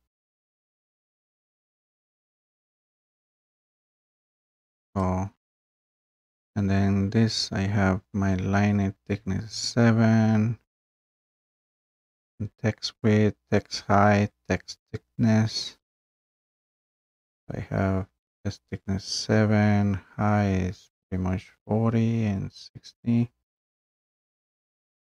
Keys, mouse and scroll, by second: 5.2-10.0 drag.